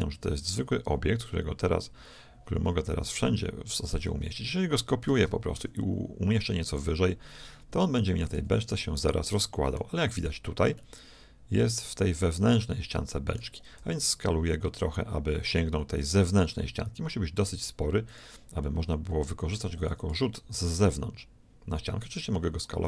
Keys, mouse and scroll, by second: 5.1 shift+d, 8.3 z, 8.9-12.6 middle drag, 13.8 s, 18.7-20.4 middle drag, 19.9 s.